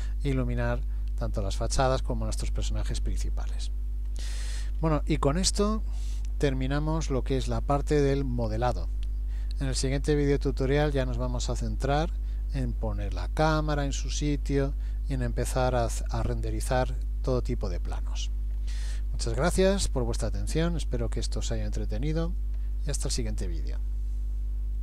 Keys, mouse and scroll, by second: 4.0-7.1 scroll up 10, 9.4 middle click.